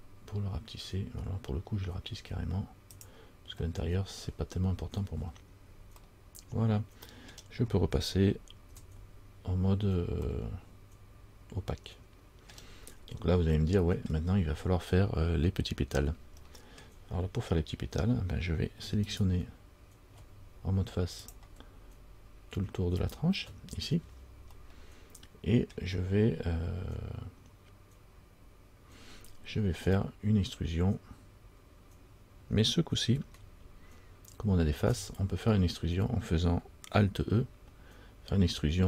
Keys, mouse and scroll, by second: 6.1 scroll down 1, 6.2 middle click, 7.5-8.0 scroll down 1, 8.9 z, 10.1 scroll down 1, 12.7-13.0 scroll up 2, 13.0 middle click, 13.0 scroll down 1, 13.1-13.7 scroll up 2, 14.3-16.5 scroll down 1, 16.6-17.5 scroll up 1, 17.5 middle click, 19.2 alt+right click, 19.2-19.7 scroll up 1, 21.4 click, 23.2 alt+right click, 24.7 scroll down 1, 24.9 middle click, 24.9-25.7 scroll up 1, 34.9 alt+e.